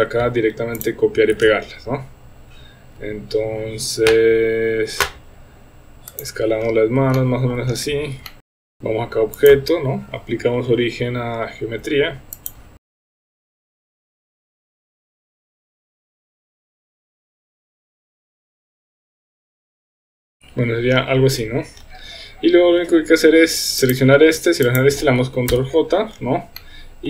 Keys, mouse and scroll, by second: 1.4 ctrl+v, 3.0 s, 7.1 shift+middle click, 8.3 shift+middle click, 8.4 s, 8.5 g, 8.6 r, 9.4-12.5 drag, 12.8-20.1 typing, 14.2 shift+middle click, 14.6 click, 15.2 middle click, 15.6 shift+middle click, 16.9 middle click, 17.2 Tab, 17.5 middle click, 17.8 middle click, 18.3 middle drag, 18.4 Tab, 18.4 click, 18.6 click, 18.7 middle click, 19.1 middle click, 19.7 Tab, 20.6 Tab, 22.8 Tab, 23.8 click, 24.7 shift+click, 25.5 ctrl+j, 26.6-27.0 middle drag.